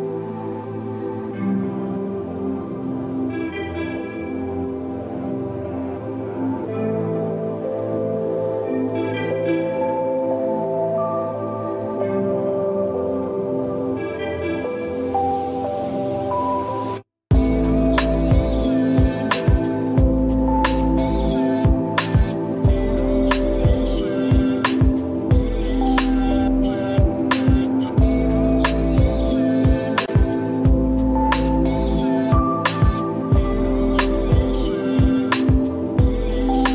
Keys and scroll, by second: 3.8 space, 18.3 space, 21.7 space, 22.4 ], 23.0 space, 25.2 space, 28.3 space, 32.1 space.